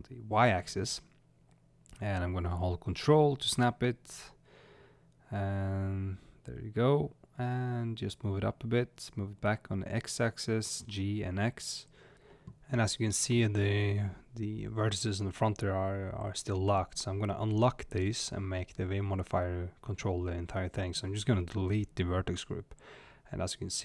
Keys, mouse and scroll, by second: 12.2-13.5 shift+middle drag, 13.5 click, 16.7 click, 18.4 space, 20.0 click, 21.7-22.4 drag, 22.7 scroll up 1, 23.4 click.